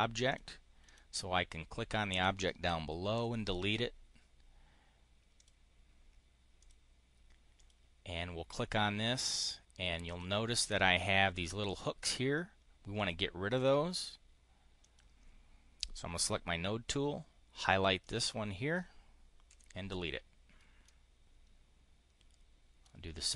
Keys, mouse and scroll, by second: 0.7 click, 3.0 Delete, 5.2 click, 6.5 click, 7.4 click, 9.9 click, 10.4 click, 12.8 click, 13.4 click, 14.7 click, 17.9 click, 19.3 Delete, 20.7-22.5 drag.